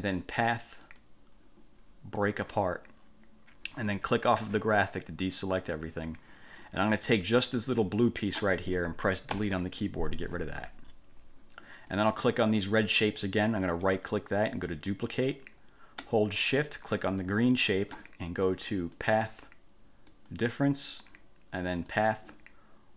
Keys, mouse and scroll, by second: 0.5 click, 1.1 click, 2.4 click, 4.3 click, 7.6-8.7 drag, 9.5 Delete, 12.1 click, 14.0 right click, 15.1 click, 17.4 shift+click, 19.1 click, 20.3 click, 22.1 click.